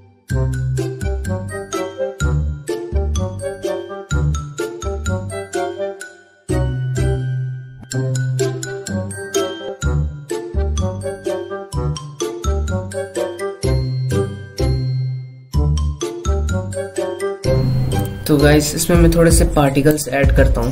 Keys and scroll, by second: 0.5 ctrl+alt+z, 3.8 ctrl+z, 4.7 ctrl+z, 7.5 ctrl+z, 9.0 ctrl+z, 10.4 ctrl+alt+z, 11.5 ctrl+z, 13.3 F7, 15.7 space, 19.0 F7.